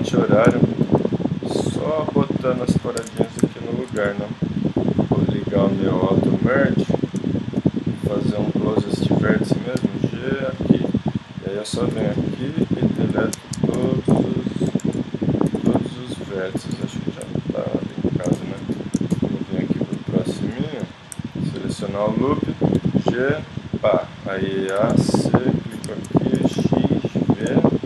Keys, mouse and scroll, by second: 2.7 middle click, 3.0 ctrl+Tab, 4.0 z, 9.8 g, 11.9 middle click, 12.1 c, 13.7 x, 14.8 z, 15.5 x, 16.7 z, 20.4 z, 22.7 g, 24.7 a, 24.9 c, 26.4 x, 27.3-27.8 middle drag.